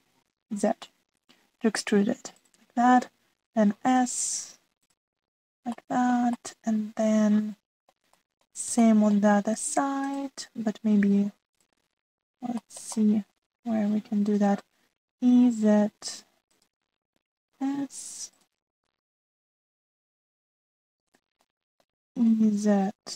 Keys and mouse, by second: 0.5 e, 4.2 s, 6.7 shift+middle click, 7.3 click, 7.5-8.9 middle drag, 9.9 shift+click, 11.0 click, 13.5 shift+middle click, 13.9-15.5 middle drag, 16.1 e, 18.4 s, 20.2 middle click, 21.4 click, 22.4 middle click.